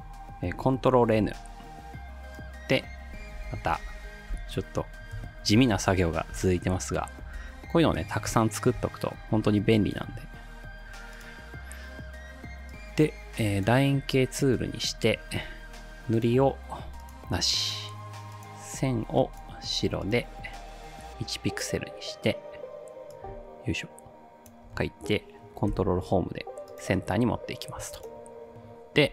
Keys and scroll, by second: 1.2 ctrl+n, 3.1-7.9 typing, 25.7 ctrl+shift+Home, 27.3 ctrl+s.